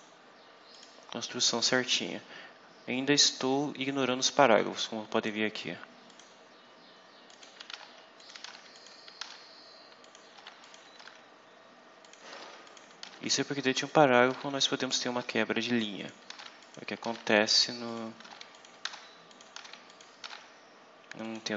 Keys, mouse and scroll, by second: 0.6 click, 3.9-5.4 drag, 6.0 click, 7.2 ctrl+click, 7.6 ctrl+v, 8.1 ctrl+click, 8.4 ctrl+v, 8.6 ctrl+click, 9.1 ctrl+v, 9.4 ctrl+scroll down 2, 9.9 ctrl+click, 10.3 ctrl+v, 10.5 ctrl+click, 10.9 ctrl+v, 11.2 ctrl+scroll down 2, 11.9 ctrl+click, 12.2 ctrl+v, 12.6 ctrl+click, 12.9 ctrl+v, 13.2 ctrl+scroll down 2, 13.8 ctrl+click, 14.2 ctrl+v, 14.8 ctrl+click, 15.1 ctrl+v, 15.3 ctrl+scroll down 2, 15.9 click, 16.2 ctrl+v, 16.5 ctrl+click, 17.0 ctrl+v, 17.2 ctrl+scroll down 2, 17.8 ctrl+click, 18.1 ctrl+v, 18.4 ctrl+click, 18.8 ctrl+v, 19.2 ctrl+click, 19.5 ctrl+v, 19.8 ctrl+click, 20.1 ctrl+v, 20.4 ctrl+scroll down 2, 21.1 click.